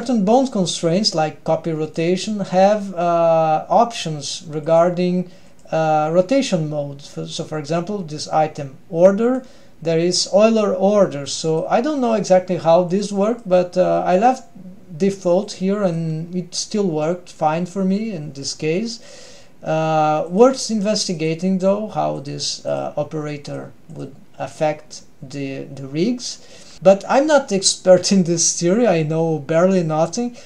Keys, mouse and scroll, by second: 1.9 click, 4.7 click, 9.3-11.6 drag, 13.0 click, 15.5 click, 20.3 click, 22.2 click, 23.5 click.